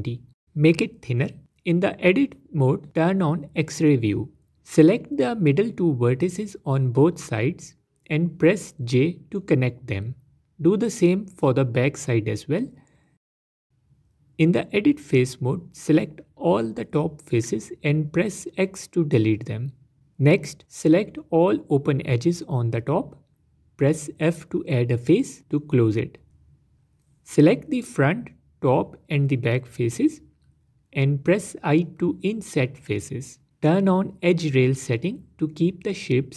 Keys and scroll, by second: 2.6 z, 5.7 j, 12.4 j, 14.7 Tab, 17.3 x, 19.4 Tab, 22.4 f, 27.0 Tab.